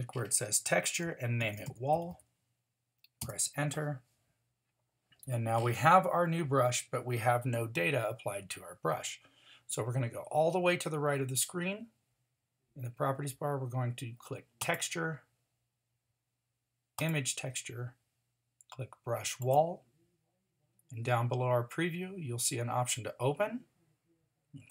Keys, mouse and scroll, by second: 2.1 l.